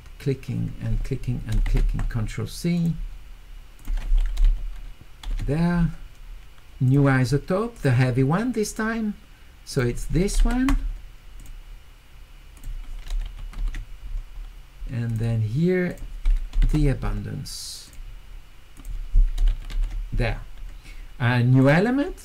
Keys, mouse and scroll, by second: 2.8 click, 3.8 click, 4.4 q, 6.9 click, 7.7 click, 9.7 click, 12.6 click, 13.2 u, 15.1 click, 15.9 click, 17.9 click, 18.8 click, 19.5 q, 21.6 click.